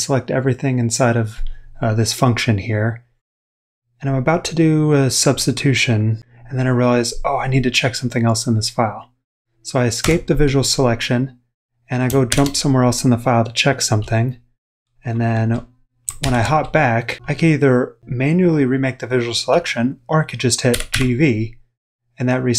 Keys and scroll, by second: 0.0-0.6 typing, 10.0 u, 12.3 shift+g, 16.2 ctrl+o, 20.5-21.4 typing.